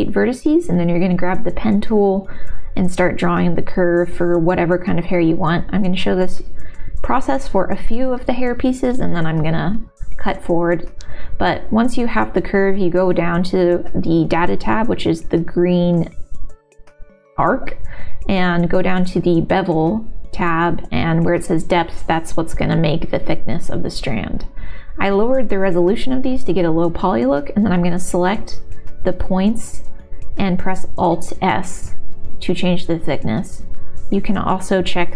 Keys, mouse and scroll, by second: 0.4 click, 6.1-7.1 middle drag, 7.1 click, 9.9 click, 10.4-14.5 drag, 15.3-19.4 drag, 21.3-23.1 drag, 23.8-25.8 middle drag, 26.0 click, 30.9 alt+s, 31.2 click, 33.6-34.8 middle drag, 34.8 g.